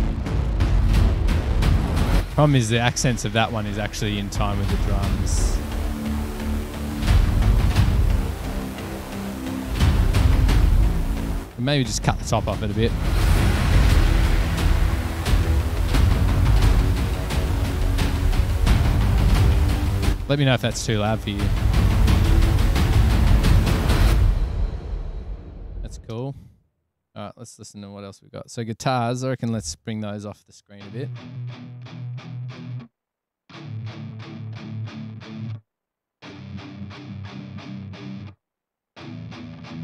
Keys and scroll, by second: 25.7 super+=, 29.6 space, 29.9 s, 30.6 super+=.